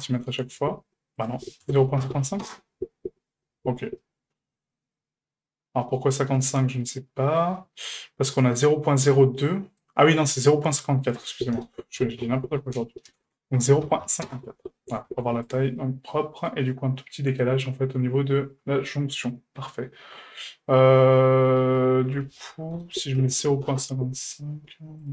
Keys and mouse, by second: 1.3-3.5 drag, 2.1 KP_5, 4.0-5.9 middle drag, 6.8-7.4 middle drag, 8.4 right click, 9.8 right click, 11.1-14.5 drag, 13.2 BackSpace, 15.1 a, 15.8-16.5 middle drag, 16.7-17.4 middle drag, 21.6-24.8 drag, 23.3 KP_5, 25.0-25.1 drag.